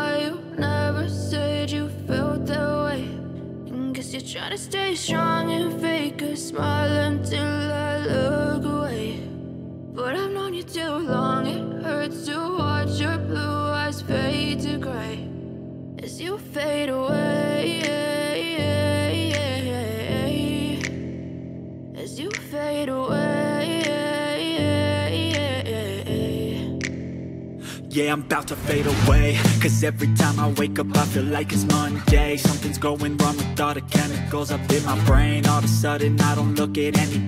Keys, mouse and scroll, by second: 1.3 click, 5.0 click, 8.4 click, 10.7 click, 14.8 click, 17.3 g, 17.8-18.6 g, 20.9 click, 23.7 click, 23.7 Tab, 25.0 right click, 26.5 shift+d, 27.4 right click, 27.9 g, 32.7 right click, 33.5 ctrl+z, 34.7 right click, 35.4 right click, 36.5 s.